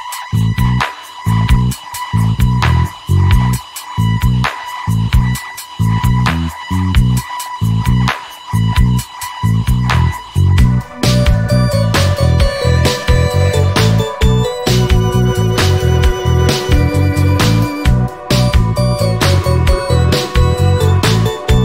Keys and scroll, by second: 7.9-8.8 typing, 12.3 a, 13.9 i, 18.0 g.